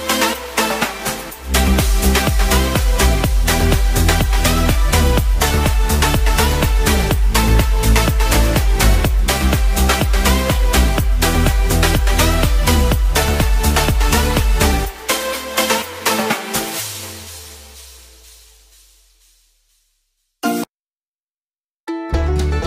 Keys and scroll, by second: 0.8 x, 2.8-3.3 typing, 3.5 ctrl+z, 9.8 x, 16.0 b, 18.3 [, 18.5 [, 18.9 [, 19.1 [, 21.8 typing.